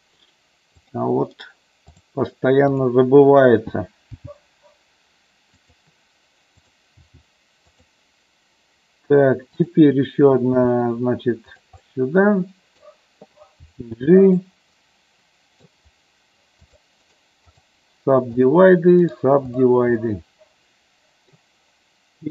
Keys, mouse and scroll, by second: 0.8 click, 1.4 right click, 2.8 click, 4.1 g, 5.5 click, 6.5 click, 7.6 click, 9.6 click, 10.5 e, 11.5 click, 11.9 middle click, 13.5 g, 14.2 click, 14.6 middle click, 16.6 click, 17.0 right click, 19.1 right click, 20.0-21.4 middle drag.